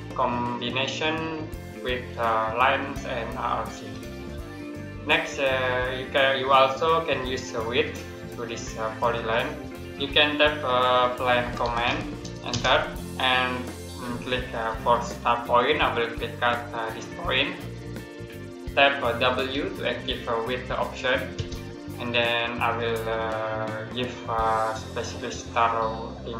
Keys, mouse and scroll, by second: 4.9 Escape, 6.7 middle click, 11.0-12.4 typing, 17.0 click, 19.4 w, 21.2 space.